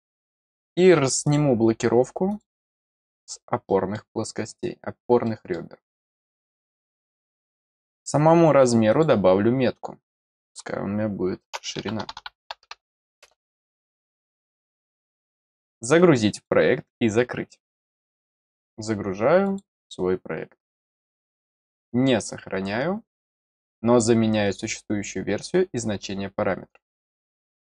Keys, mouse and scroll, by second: 1.2 click, 2.2 click, 3.6 middle click, 4.4 scroll down 1, 5.2 middle click, 6.7 click, 8.8 click, 16.3 click, 19.4 click, 21.6 click, 24.4 click.